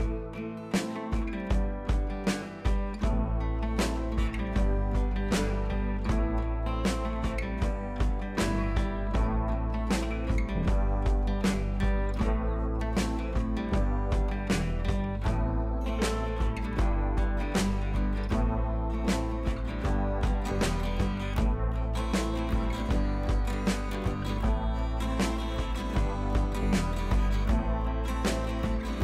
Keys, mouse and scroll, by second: 0.1 click, 1.4 ctrl+v, 2.1 ctrl+t, 3.0-4.5 alt+drag, 4.5 scroll up 1, 5.0-6.9 drag, 6.9-10.5 alt+drag, 10.5-12.5 alt+drag, 12.5 ctrl+t, 13.3 alt+click, 13.9-16.0 drag, 16.2 click, 19.5 click, 20.1 scroll down 1, 20.5 ctrl+z, 20.8 click, 21.3 click, 21.8 scroll up 1, 22.1 ctrl+t, 22.8-24.5 alt+drag, 24.5-24.8 scroll up 1, 26.1 click, 26.2 space, 26.4 click, 26.6 space, 27.4 scroll down 1.